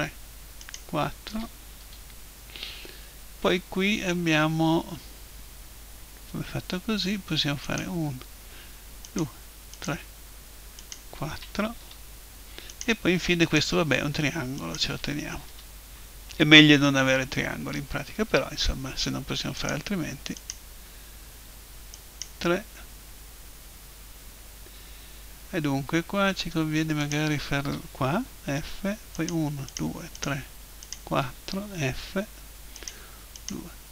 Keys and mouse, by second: 1.8 f, 7.7-12.5 right drag, 11.8 f, 12.5-16.3 right drag, 15.5 f, 16.3-18.9 middle drag, 19.6-23.9 right drag, 23.6 middle click, 27.0-28.8 right drag, 28.1 f, 28.6 middle click, 29.1-32.5 right drag, 31.7 f, 32.5 middle click, 32.7-33.9 right drag.